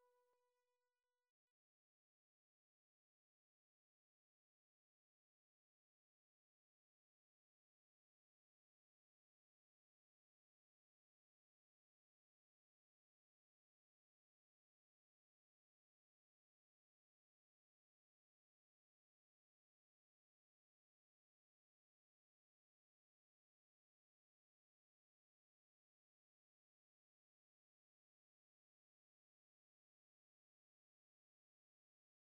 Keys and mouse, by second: 1.1 click, 5.0 click, 7.8 ctrl+click, 11.4 ctrl+click, 13.1 ctrl+click, 14.9 ctrl+click, 15.0 typing, 17.1 ctrl+click, 18.6 ctrl+click, 18.7 ctrl+click, 21.6 ctrl+click, 21.7 ctrl+click, 23.1 typing, 24.4 typing, 25.7 typing, 25.8 click, 28.2 click.